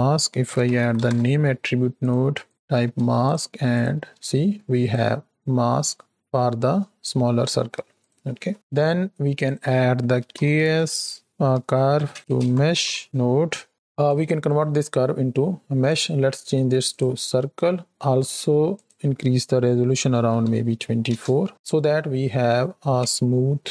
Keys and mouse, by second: 2.4 click, 3.2-4.0 ctrl+shift+drag, 4.2 click, 8.0 drag, 8.3 x, 8.5 x, 8.5 shift+a, 13.7 click, 15.9-17.0 drag, 18.7-21.1 drag, 23.0 space.